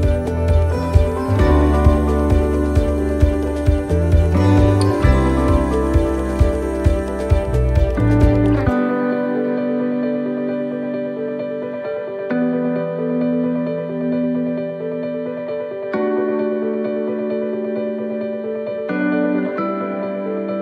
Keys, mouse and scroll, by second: 1.7 right click, 2.3 click, 4.2 right click, 5.0 click, 10.1 right click, 11.1 click, 14.4 click, 17.9-18.2 scroll up 5, 19.0 right click, 19.8 click, 20.1 click.